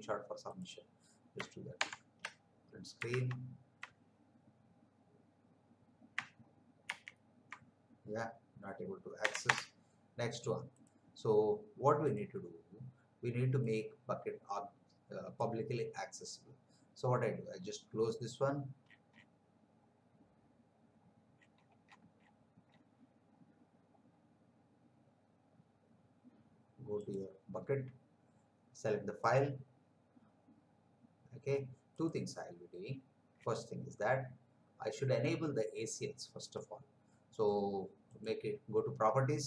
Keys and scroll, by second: 1.7 shift+Print, 3.2 alt+Tab, 6.8 ctrl+v, 9.2 Return.